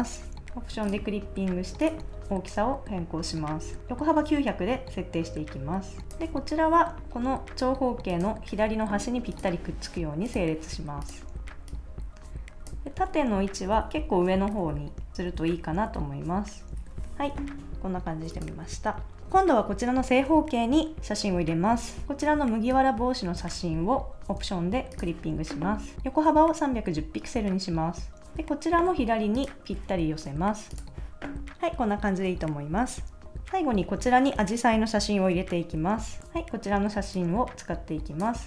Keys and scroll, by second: 0.4 Return, 13.5 shift+Down, 14.1 shift+Up, 14.4 shift+Down, 15.1 shift+Up, 15.8 shift+Down, 16.7 Down, 17.0 super+s, 36.1 super+Tab.